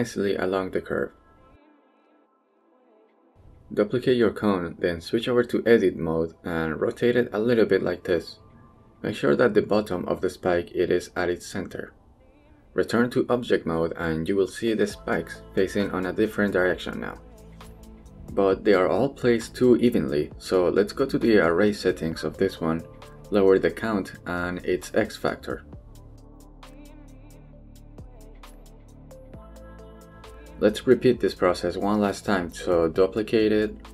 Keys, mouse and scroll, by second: 1.7 click, 3.5 shift+d, 5.5 click, 6.5 KP_3, 7.1 shift+middle click, 8.0 shift+middle click, 8.5 shift+middle click, 8.9 r, 10.1 g, 11.4 click, 12.4 middle click, 13.1-13.6 scroll down 1, 13.7 shift+middle click, 14.5 middle click, 14.7 scroll down 1, 14.9 Tab, 15.1 shift+middle click, 15.4 click, 15.7 middle drag, 16.0 shift+middle drag, 16.4-17.3 middle drag, 18.3 middle drag, 19.7-20.0 middle drag, 21.4-21.9 middle drag, 22.1 shift+middle drag, 23.8-24.9 drag, 25.6-27.3 drag, 27.7 click, 28.7-29.9 drag, 30.4-32.1 middle drag, 33.3 middle click, 33.7 shift+d.